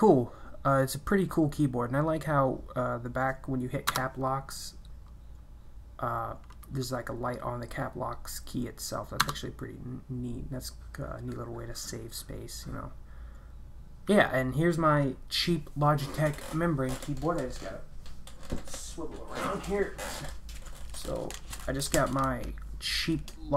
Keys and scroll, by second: 3.9 Caps_Lock, 9.2 Caps_Lock.